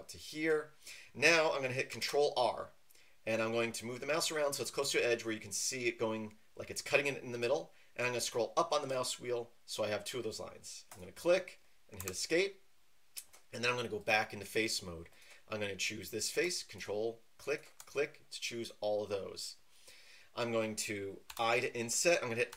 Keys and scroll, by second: 2.0 ctrl+r, 12.0 Escape, 21.3 i.